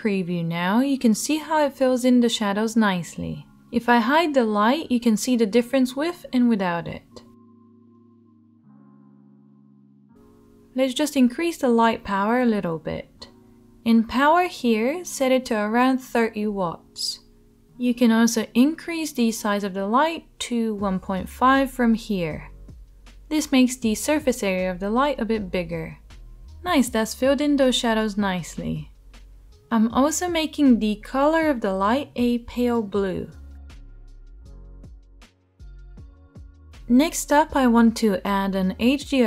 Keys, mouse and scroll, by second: 5.7 h, 8.7 ctrl+z, 14.9-29.6 drag, 14.9-39.2 middle drag.